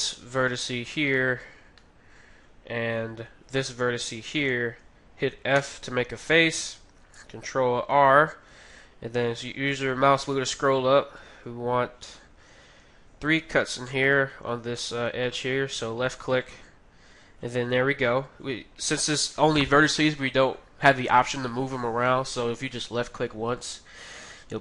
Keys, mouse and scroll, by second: 1.1-3.6 middle drag, 4.3-7.9 right drag, 5.5 f, 7.9 ctrl+r, 16.0-17.8 drag, 18.1-19.7 middle drag.